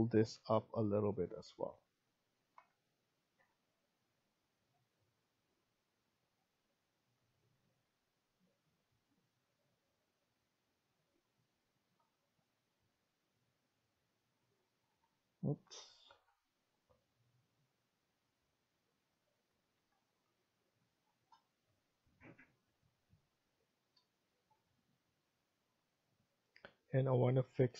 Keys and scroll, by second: 1.1 Escape, 1.4 Escape, 7.7-8.4 typing, 14.7 Escape, 16.0 ctrl+z, 19.5 Escape, 27.1 Escape, 27.5 Escape.